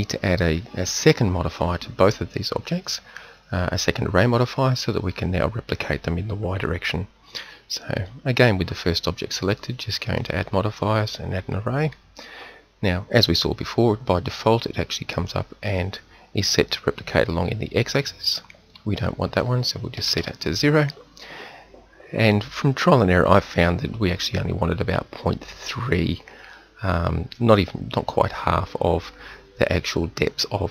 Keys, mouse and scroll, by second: 8.0-10.0 right drag, 10.0-12.3 drag, 15.6-24.4 drag.